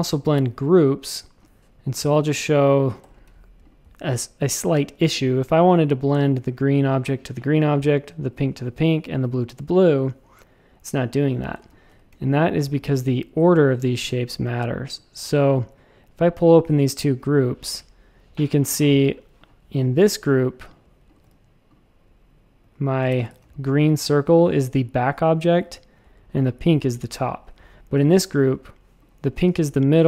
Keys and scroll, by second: 3.0 alt+super+b, 11.6 space, 11.9 a, 21.2 v, 22.6 a, 23.1 shift+super+a.